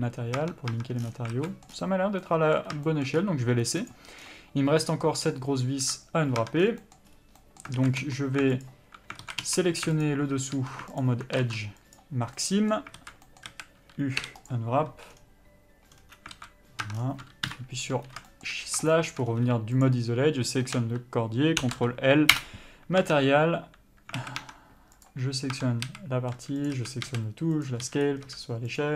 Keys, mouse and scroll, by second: 0.7 Tab, 1.3 scroll down 1, 1.6 alt+a, 1.8 middle click, 2.0 scroll up 1, 2.5 middle click, 3.2 shift+middle click, 3.5-4.2 scroll up 1, 4.2 click, 4.5 scroll down 1, 5.1 middle click, 6.1 KP_Divide, 6.7 Tab, 6.9 scroll down 1, 7.1 middle click, 7.4-7.7 scroll up 1, 7.7 middle click, 8.1 alt+a, 8.9 alt+click, 9.6 alt+a, 10.2 a, 10.3 alt+click, 10.9 2, 11.3 alt+click, 12.3 ctrl+e, 12.6 scroll down 1, 12.7 middle click, 13.3 alt+a, 13.6 middle click, 14.8 u, 16.6 alt+a, 17.1 Tab, 17.3-17.8 scroll down 1, 17.8 KP_Divide, 18.6 shift+middle click, 19.5-20.2 scroll up 1, 20.2 shift+click, 22.7 ctrl+l, 23.3 Tab, 24.5 alt+a, 24.7 Tab, 25.4 click, 25.9 Tab, 26.2 a, 27.0 click, 27.1 a, 27.4 s, 27.9 click, 28.1 s.